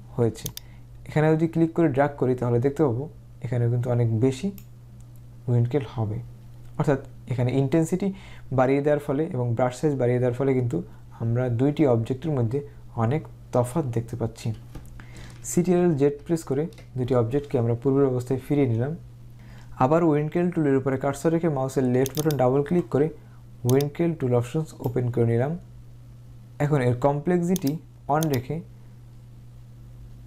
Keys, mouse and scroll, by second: 0.6-5.6 drag, 15.4-16.1 typing, 22.3 click, 23.8 click, 27.7 click, 28.3 click.